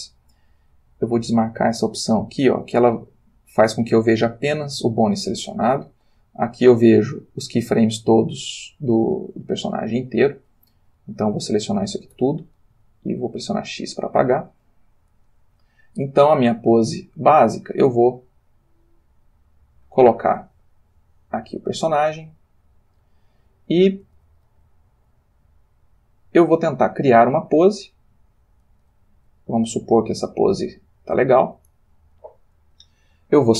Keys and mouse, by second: 6.1 click, 7.2-9.6 middle drag, 9.7 middle click, 10.7 middle click, 11.2 middle click, 12.1 a, 13.2 x, 13.7 click, 15.9-16.5 drag, 16.5 g, 20.2 click, 21.0 click, 21.5 g, 22.8 click, 24.2 click, 24.4 r, 26.3 click, 27.0 click, 27.4 r, 28.1 click, 29.7 click, 30.5 r, 30.9 click.